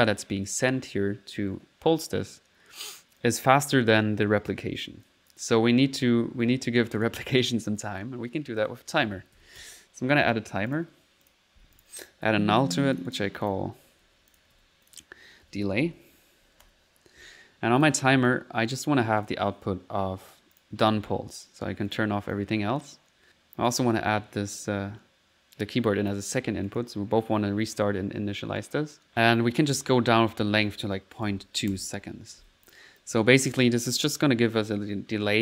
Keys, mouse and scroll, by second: 3.2 click, 4.0 typing, 5.1 click, 5.9 middle click, 7.0 click, 8.6 middle click, 8.7-10.1 typing, 10.8 click, 11.3 click, 11.6 click, 11.8 click, 12.3 alt+n, 12.6-14.0 alt+drag, 14.6 z, 14.9 ctrl+click, 15.5 ctrl+z, 17.8 click, 18.1 click, 18.1-18.5 typing, 19.2 click, 20.6 click, 20.9 click, 21.4 click, 21.9 click, 22.3 click, 23.2 middle click, 23.7-26.3 drag, 26.7 click, 28.6 click, 30.0 click, 32.7 click, 33.8 middle click, 34.7 middle click.